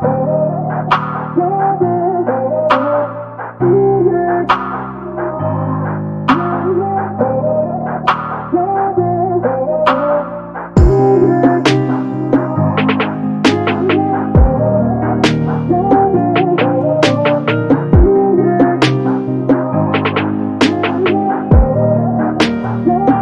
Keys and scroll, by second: 1.0 space, 5.1 f, 6.6 0, 9.2 5, 9.7 Return, 11.5 Escape, 14.9 space, 16.6 e, 22.3 p.